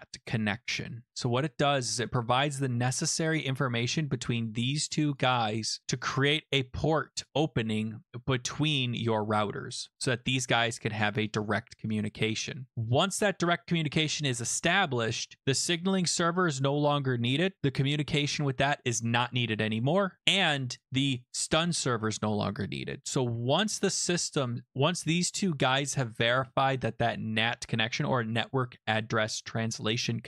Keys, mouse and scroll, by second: 3.9 click, 5.2 click, 6.0 click, 7.2 click, 8.2 click, 10.4 click, 11.3 click, 12.7 click, 16.0 click, 20.8 click, 21.2 click, 24.7 click, 25.6 click.